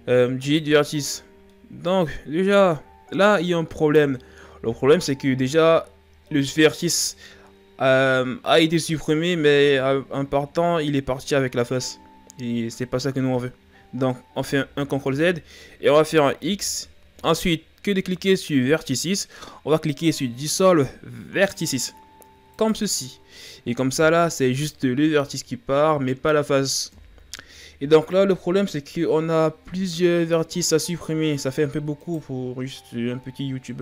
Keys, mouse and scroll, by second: 1.5-3.1 middle drag, 3.1-3.8 ctrl+scroll down 4, 3.8 middle click, 4.4-6.3 scroll up 2, 6.3-9.1 middle drag, 9.1-10.1 ctrl+scroll up 4, 10.1 ctrl+scroll up 5, 10.8-13.5 scroll up 3, 14.5 ctrl+z, 16.5 x, 27.0 KP_1, 32.1 right click.